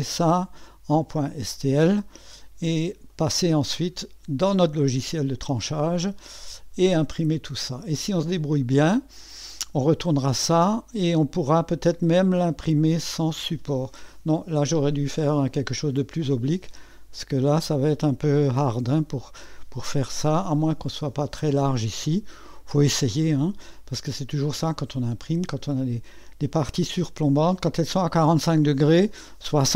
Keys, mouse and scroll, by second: 0.0 click, 2.2 2, 3.1-4.3 drag, 7.0-9.9 drag, 10.2 click, 13.0 click, 14.2 click, 19.8 click, 23.4 click, 24.4-25.5 drag, 26.3 click, 26.9-28.6 drag, 28.8-29.7 drag.